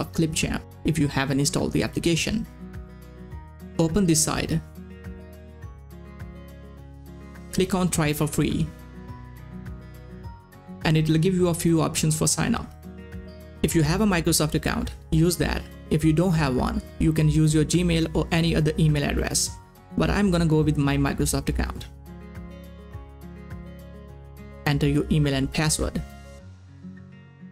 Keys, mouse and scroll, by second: 0.0-1.8 typing, 4.5 click, 8.5 click, 8.5 click, 22.1 click, 22.1 click.